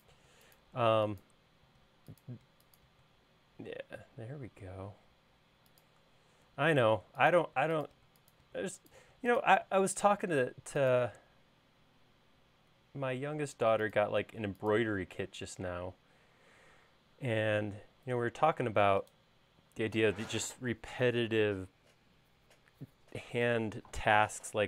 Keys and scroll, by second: 0.0-0.8 typing, 6.9-10.2 typing, 14.3 BackSpace, 14.9 BackSpace.